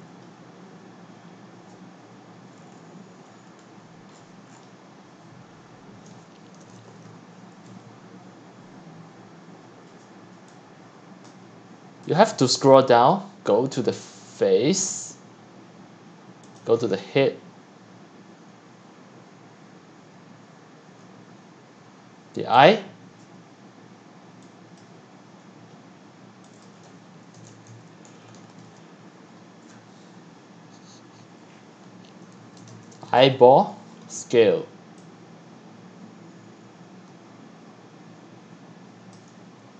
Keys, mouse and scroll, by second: 1.9-3.7 scroll down 10, 3.7 scroll, 3.8-4.1 scroll, 4.1 scroll, 4.2 scroll, 4.4 scroll, 4.7 scroll, 6.4-7.6 typing, 11.3-15.8 drag, 16.5 click, 19.5-22.0 drag, 22.7-24.4 drag, 27.1-30.1 typing, 32.1-33.8 typing, 39.1 click.